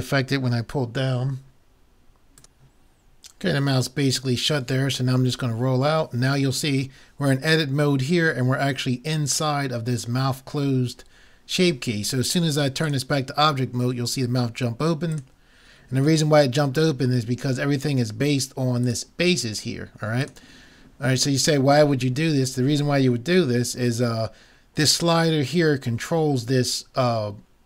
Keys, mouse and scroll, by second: 5.3-6.3 scroll down 1, 18.9-22.0 drag, 22.1 middle click.